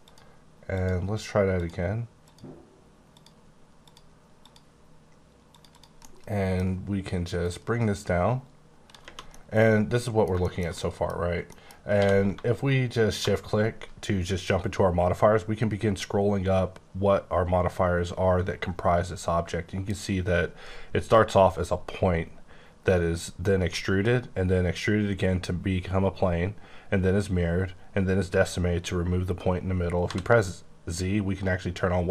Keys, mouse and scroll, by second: 0.0 click, 1.6 click, 2.2 click, 3.8 click, 4.4 click, 5.5 click, 5.7 double click, 6.0 middle click, 7.4 click, 9.3 middle click, 10.7 double middle click, 11.1 scroll down 2, 11.4 middle click, 11.9 q, 13.1 shift+click, 14.8-15.6 scroll up 10, 16.1-16.9 scroll down 7, 16.9-18.5 scroll up 7, 18.5-18.8 scroll up 1, 18.8-21.7 scroll down 12, 22.5-24.3 scroll up 1, 24.4 scroll up 2, 26.4-27.5 scroll up 1, 27.5 scroll up 1, 30.1 z, 31.2 scroll down 2, 31.8-32.1 scroll up 1.